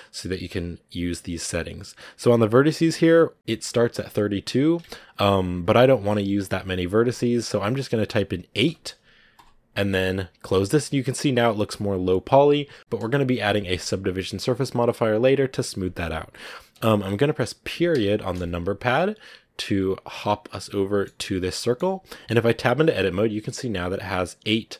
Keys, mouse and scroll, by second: 10.3 click, 10.9 scroll up 2, 12.8-15.3 scroll down 4, 17.8 KP_Decimal, 19.7-20.0 scroll down 2, 20.0-21.1 middle drag, 21.1 scroll up 2, 21.5 middle click, 21.8 scroll down 1, 21.9 middle click, 22.5 Tab, 23.8-24.7 right drag.